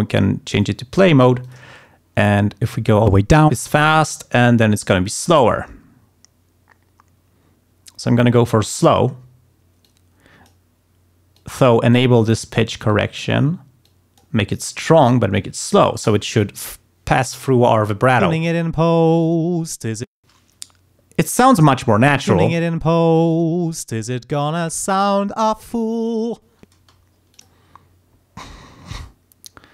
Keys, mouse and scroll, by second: 1.4 click, 2.1 click, 2.6-8.9 drag, 9.8 click, 11.3 click, 12.8 click, 13.8 click, 15.3 click, 18.3 space, 20.1 space, 22.4 space, 25.1 ctrl+scroll down 2, 25.4 ctrl+scroll up 2, 26.7 space, 27.3 click.